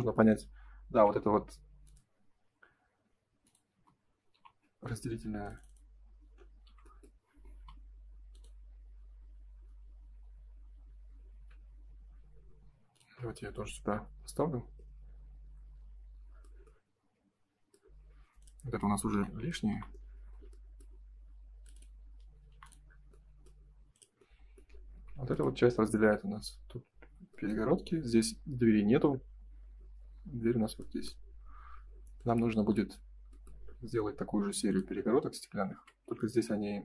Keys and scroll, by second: 0.9 r, 3.6 space, 4.3 p, 5.1 space, 6.6 g, 13.7 space, 19.0 Delete, 24.7 space, 24.9 Escape, 25.9 ctrl+s, 35.6 ctrl+s.